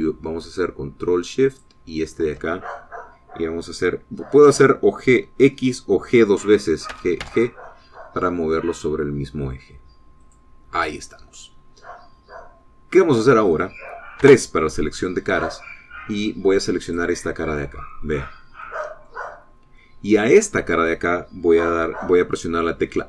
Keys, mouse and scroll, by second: 2.6 alt+shift+click, 7.9 g, 11.3 click, 15.3 3, 17.9 click, 19.7 middle click, 20.4 scroll up 1.